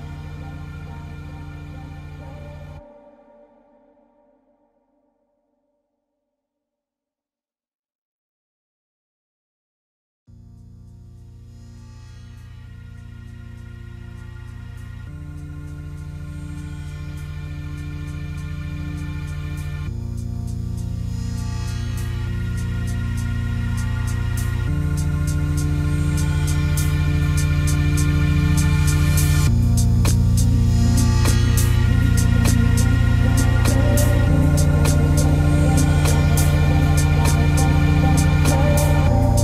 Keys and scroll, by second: 34.8 ctrl+space.